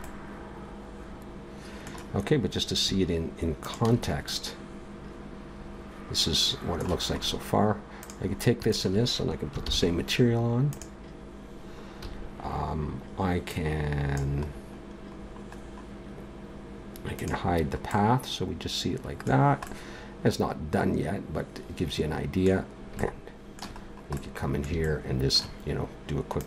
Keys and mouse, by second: 4.3-6.3 middle drag, 8.0-9.6 right drag, 9.6 ctrl+l, 12.0 a, 13.5-15.0 right drag, 15.0 click, 15.2 middle click, 17.1-19.1 middle drag, 22.0 middle click, 26.4 click.